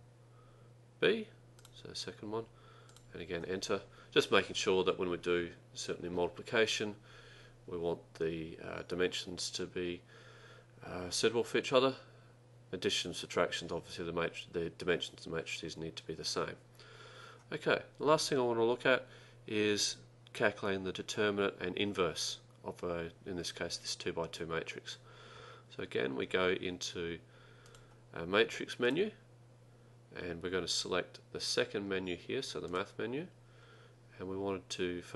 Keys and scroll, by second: 1.6 2, 3.0 Return, 32.8 ).